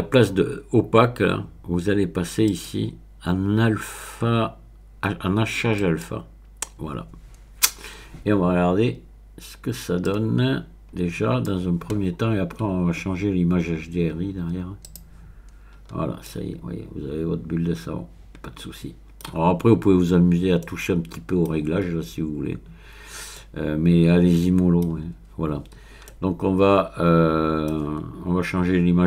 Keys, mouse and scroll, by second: 2.5 click, 5.8 click, 10.0-11.9 drag, 13.7-14.8 scroll down 1, 14.8 click, 15.7-16.3 scroll up 1, 16.3-16.6 scroll up 1, 16.6-25.1 middle drag, 25.1-26.1 scroll down 1, 26.1-26.5 scroll down 1, 26.5-28.0 middle drag.